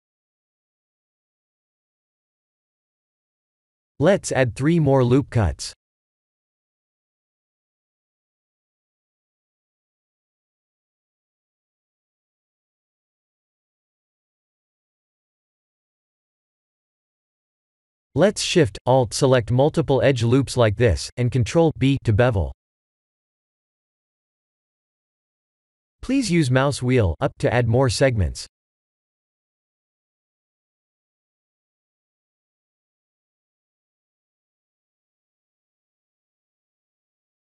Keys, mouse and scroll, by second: 4.8 ctrl+r, 11.4-12.7 scroll up 1, 17.2 2, 17.7 alt+click, 19.0 alt+shift+click, 20.3 alt+click, 21.5 alt+shift+click, 23.5 ctrl+b, 31.7-32.4 scroll up 5, 32.7 2, 34.2 alt+click, 35.5 shift+middle click, 36.2 shift+middle click, 36.4-36.9 scroll up 5, 37.4 3.